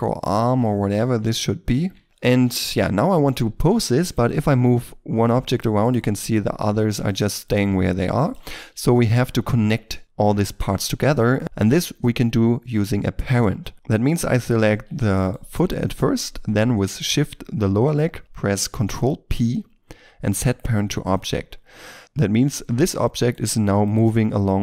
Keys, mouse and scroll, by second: 0.1 middle click, 0.4 s, 0.6 x, 1.8 Tab, 2.0-2.4 shift+scroll down 1, 2.4 KP_3, 4.0 right click, 4.4 r, 4.5 r, 5.4 right click, 6.1 r, 6.3 r, 7.0 right click, 7.7 r, 7.8 r, 8.2 right click, 8.5 scroll up 1, 8.8 shift+middle click, 13.7-14.6 shift+scroll down 1, 14.6 g, 15.2 right click, 16.8 shift+right click, 19.2 ctrl+p, 22.0 right click, 22.6 g, 23.1 right click, 24.4 r.